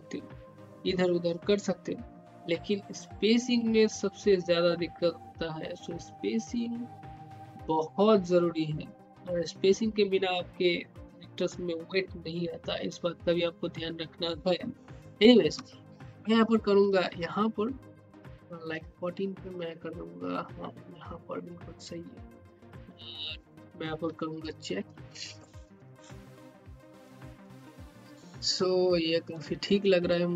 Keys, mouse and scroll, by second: 16.8-23.2 drag, 23.3 click, 24.4-25.7 typing, 26.7-29.2 typing.